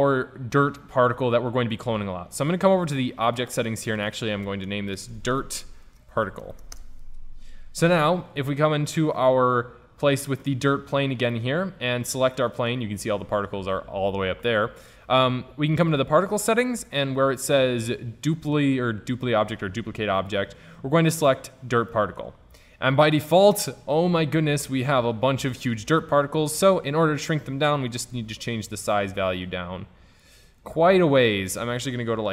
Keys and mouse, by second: 2.4-5.9 drag, 9.2-11.3 drag, 11.3-13.5 middle drag, 14.2-15.8 middle drag, 15.8-17.7 drag, 20.3-22.2 drag, 22.2 middle click, 28.2-30.0 drag, 30.9-32.3 drag.